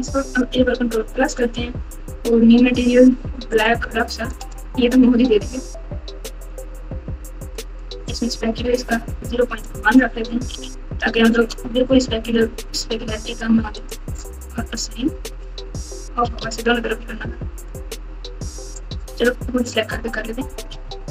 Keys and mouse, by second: 1.0 ctrl+KP_Add, 3.5 click, 4.3 click, 9.9-11.3 drag, 16.4 Tab, 20.8 ctrl+KP_2.